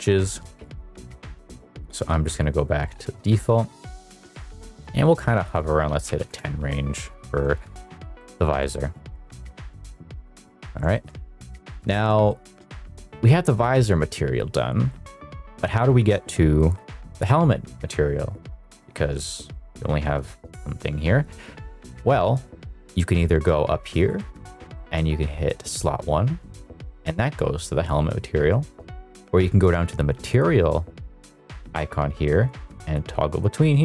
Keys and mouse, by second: 0.7 ctrl+z, 1.4 ctrl+z, 2.2 ctrl+z, 3.5-5.4 drag, 5.5 click, 7.7 middle click, 8.1 middle click, 8.6 shift+middle click, 9.4 shift+middle drag, 10.0 shift+middle click, 10.8 shift+middle drag, 11.4 middle drag, 11.7 shift+middle drag, 12.2 middle click, 14.9 middle click, 24.1-27.1 drag, 30.3 click, 32.8-33.4 drag, 33.7 click.